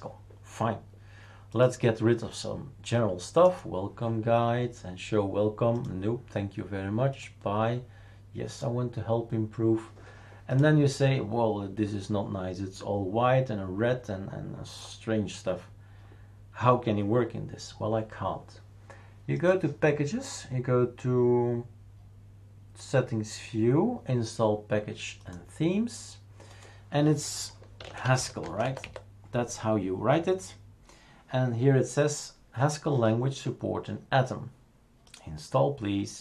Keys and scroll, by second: 27.5-29.3 typing.